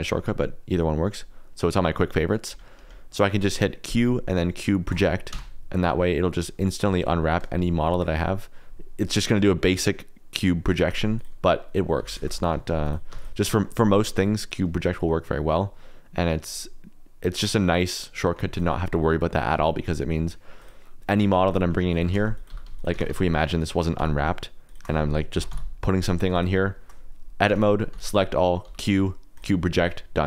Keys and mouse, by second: 2.7 Escape, 3.8 q, 5.3 Tab, 5.8 click, 6.4 click, 7.9 shift+a, 11.9-13.1 typing, 12.3 click, 14.2 click, 17.4 click, 18.2 middle click, 18.5 click, 19.7 middle click, 20.5 click, 21.2-23.0 typing, 22.9 Tab, 24.0 Tab, 24.6 shift+click, 25.3 ctrl+l, 26.3 click, 26.5 shift+middle click, 27.5 Tab, 27.9 a, 28.6 q.